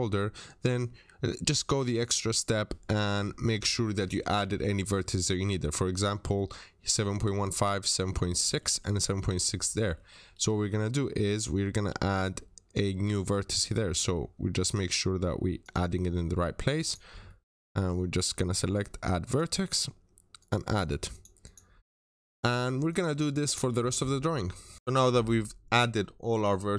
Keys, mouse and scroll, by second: 5.7-6.1 scroll down 1, 6.1 scroll up 1, 7.3 middle click, 8.1 scroll down 1, 8.2 middle click, 9.5 Escape, 9.8 middle click, 10.2 typing, 10.3 Return, 10.5 scroll up 1, 12.9 click, 13.2-13.9 scroll down 2, 13.4 middle click, 13.9 scroll up 1, 15.5 click, 15.7 Escape, 16.0-16.7 scroll up 1, 16.7 click, 17.1-17.6 scroll down 2, 17.1 middle click, 19.1 scroll down 1, 19.1 click, 19.5-20.1 scroll up 1, 20.3 click, 20.5 Escape, 21.0 click, 21.3 double click, 21.6 scroll down 1, 21.7 middle click, 22.1 Delete, 22.8 click, 23.3 Delete, 23.6 scroll down 1, 23.7 middle click, 24.7 scroll down 1, 25.9 middle click, 26.2 scroll up 1.